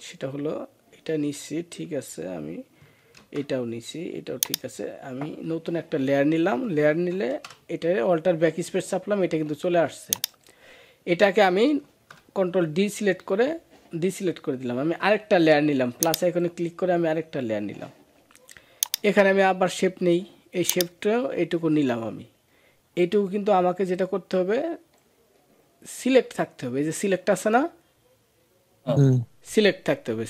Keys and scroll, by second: 7.1 alt+BackSpace, 11.6 ctrl+d.